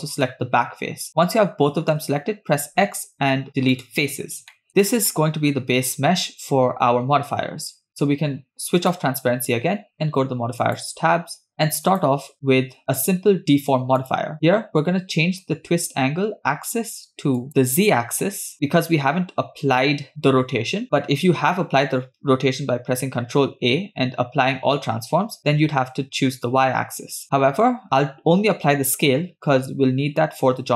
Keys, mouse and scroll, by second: 0.8-2.3 middle drag, 2.7 x, 4.7 Tab, 4.7 middle click, 4.8-5.8 scroll down 1, 5.8 middle click, 5.8 scroll down 1, 9.9 click, 10.8 click, 12.8-14.8 drag, 17.7 click, 22.9 ctrl+a.